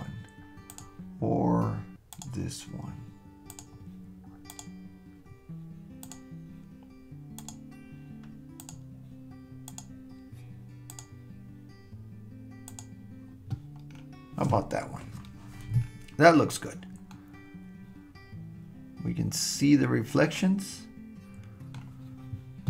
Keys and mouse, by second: 17.1-21.9 middle drag, 20.2-21.9 right drag.